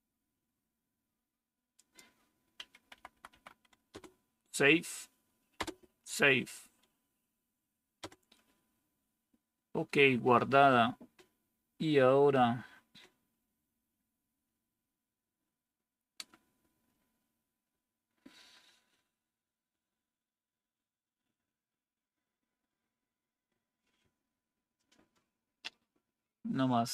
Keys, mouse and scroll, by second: 2.8 Right, 3.0 Right, 3.2 Right, 3.8 Return, 5.5 Return, 7.9 Return.